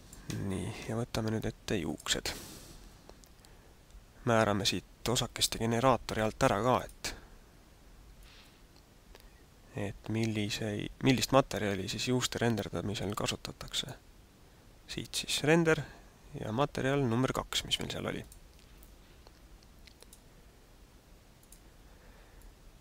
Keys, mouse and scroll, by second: 1.9 click, 6.7 click, 8.2 click, 18.3 click, 21.3 click, 22.3 click.